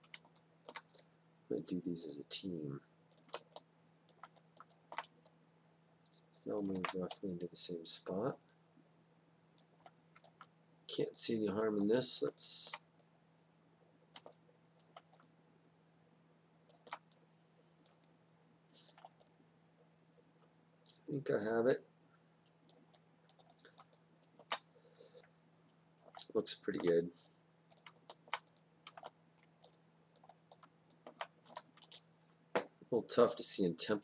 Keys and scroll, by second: 6.7 ctrl+z, 31.5 e.